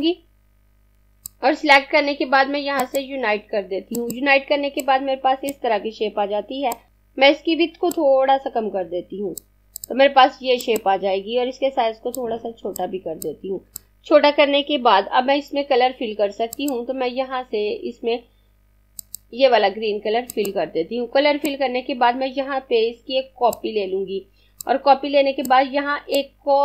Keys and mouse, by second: 6.9 ctrl+z, 7.9 click, 16.3 click, 24.1 click.